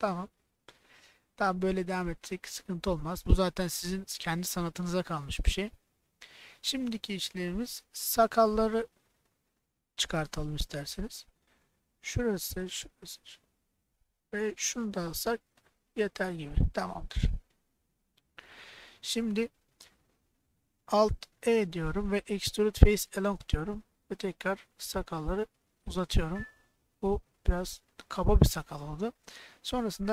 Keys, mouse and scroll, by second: 0.1 middle click, 1.0 middle click, 1.8 middle click, 2.7 middle click, 7.9 middle click, 9.2 KP_1, 11.5 click, 12.6 shift+click, 16.2 middle click, 17.9 KP_1, 21.5 alt+e, 26.0 click, 26.3 middle click, 27.8 middle click, 29.1 middle click.